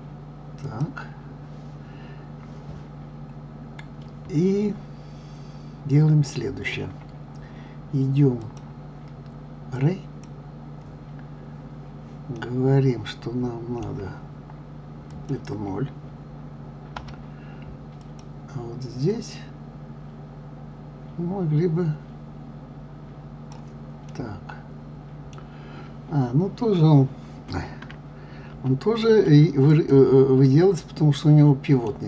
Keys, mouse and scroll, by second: 0.6 click, 8.4-11.4 drag, 12.3-15.1 middle drag, 15.1-18.1 drag, 19.1-22.1 drag, 24.1-27.1 middle drag, 28.5 ctrl+z, 29.7 click, 30.4-32.0 middle drag.